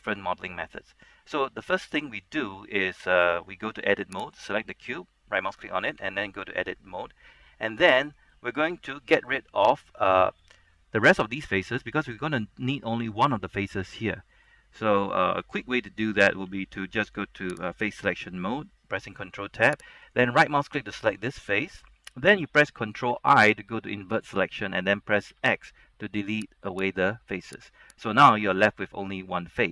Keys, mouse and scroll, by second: 3.3 middle click, 4.5 right click, 6.1 Tab, 7.8-9.6 middle drag, 9.6 scroll up 1, 9.9-15.3 middle drag, 16.6 ctrl+Tab, 17.7 click, 20.2 right click, 23.2 ctrl+i, 25.5 x, 26.8 click, 28.0 right click, 28.4-29.7 middle drag.